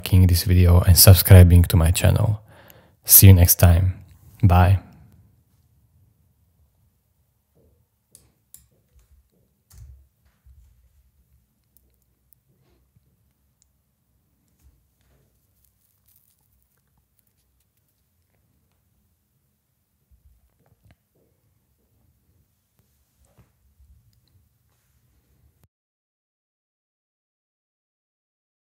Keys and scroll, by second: 9.7 BackSpace, 10.7 e.